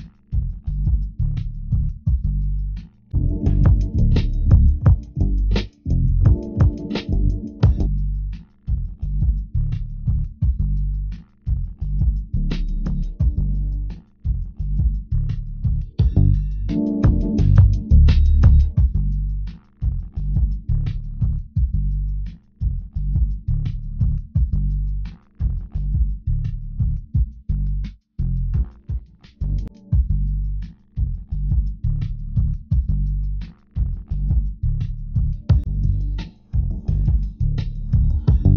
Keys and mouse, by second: 2.8 Tab, 4.5 ctrl+Tab, 28.8 KP_5, 34.1 Tab, 35.4 Tab, 37.0 ctrl+r.